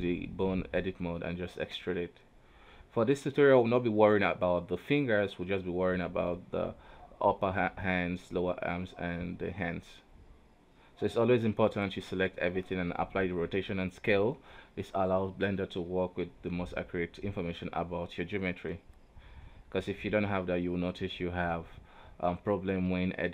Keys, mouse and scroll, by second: 0.3 shift+scroll up 2, 0.8 Tab, 1.3 right click, 2.3 e, 3.8-5.4 middle drag, 5.4 click, 6.1 KP_3, 6.9 g, 8.1 e, 9.4 middle click, 10.3 KP_3, 10.6 Tab, 11.5 q, 13.0 o, 13.4 scroll down 1, 13.5 a, 14.3 ctrl+a, 15.5-15.8 scroll up 2, 15.8 alt+a, 16.6 right click, 18.2 ctrl+Tab, 18.8 right click, 19.0 r, 20.2 right click, 20.4 r, 22.2 right click, 22.3 r, 23.1 Tab.